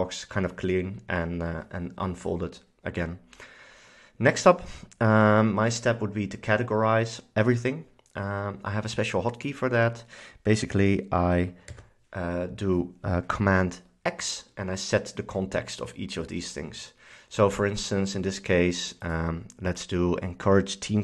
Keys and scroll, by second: 11.8 super+x.